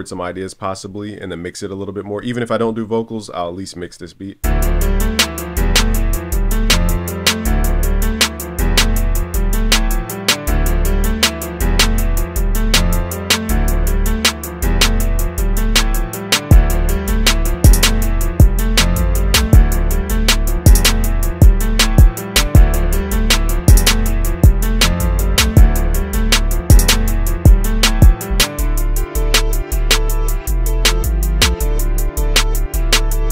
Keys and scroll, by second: 3.9 super+s.